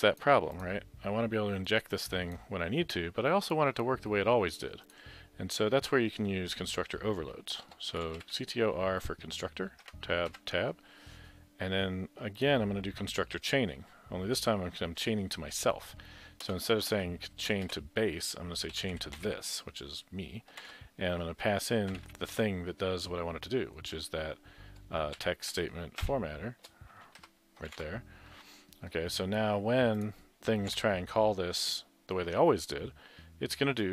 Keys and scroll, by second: 7.6 Return, 7.7 Return, 7.7-8.7 typing, 9.9 Tab, 9.9 typing, 10.3 Tab, 18.7-22.6 typing, 25.0-26.1 typing, 27.6-28.3 typing, 30.7 Delete.